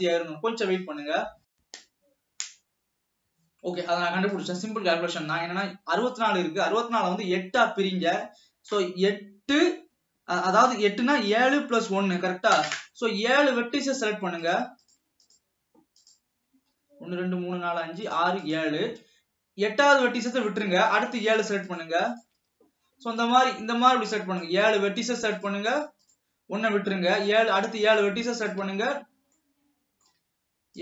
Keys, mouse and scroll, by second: 4.5 click, 5.4 scroll up 1, 13.9 click, 14.6 shift+click, 14.9-15.3 shift+drag, 16.1 shift+drag, 18.2 shift+click, 18.5 shift+click, 21.2 shift+click, 22.0 shift+click, 23.4 click, 25.5 shift+click, 25.9 shift+click, 26.2 shift+click, 27.8 shift+click, 28.1 shift+click, 28.6 shift+click, 29.1 scroll down 2, 29.6-30.8 middle drag.